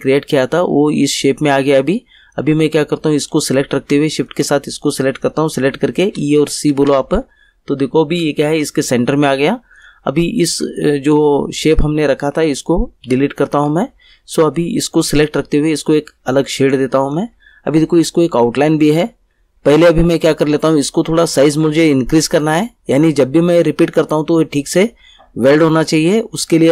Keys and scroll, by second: 6.0 e, 6.7 c, 13.0 Delete.